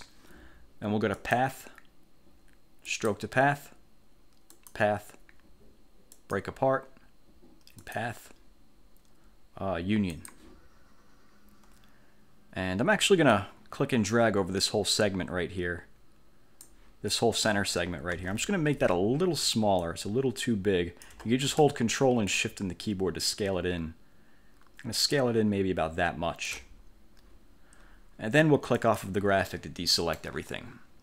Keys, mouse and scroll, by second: 1.3 click, 3.0 click, 4.7 click, 6.2 click, 8.0 click, 10.2 click, 13.4-17.0 drag, 17.2 click, 18.3 ctrl+z, 19.9-21.4 ctrl+shift+drag, 22.4-26.8 ctrl+shift+drag, 28.8 click, 29.6 middle click, 30.0 click.